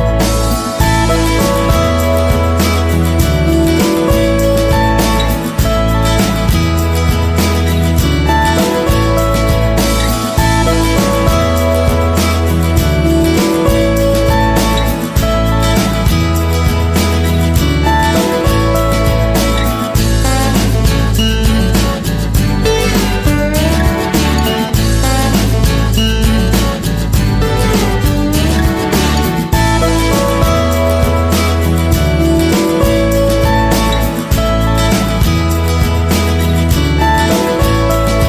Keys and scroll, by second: 0.0 ctrl+=.